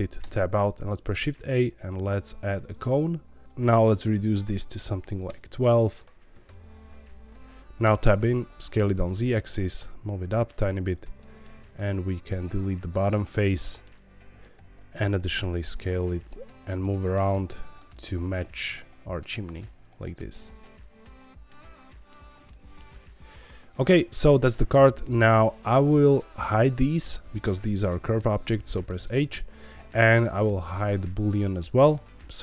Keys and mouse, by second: 0.2 Tab, 0.7 shift+a, 3.4 click, 4.2-5.8 drag, 7.3 Tab, 7.8 Tab, 8.7 s, 8.8 z, 9.6 click, 9.7 g, 9.8 z, 10.9 click, 11.1 middle click, 11.5 3, 11.8 click, 12.1 x, 13.3 middle click, 14.3 Tab, 14.5 s, 15.6 click, 15.8 z, 16.5 click, 16.8 middle click, 17.2 r, 17.6 click, 17.9 middle click, 18.5 r, 19.4 click, 19.5 g, 20.0 click, 20.3-22.1 middle drag, 22.5 shift+middle click, 25.5 click, 28.8 h, 31.0 click.